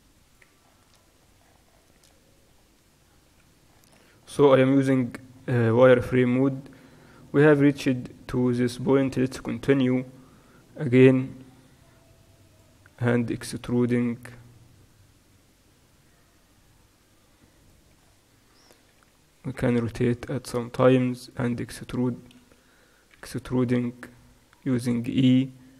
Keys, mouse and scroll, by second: 1.1-9.4 middle drag, 3.3 z, 4.1 Tab, 10.9 e, 14.1 e, 19.1 r, 21.6 r, 23.2 e.